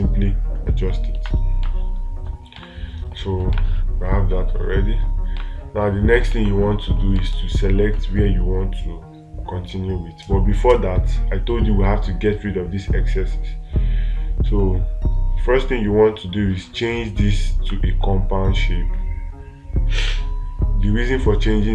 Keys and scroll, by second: 2.1 space, 4.0 space, 5.8 space, 6.8 space.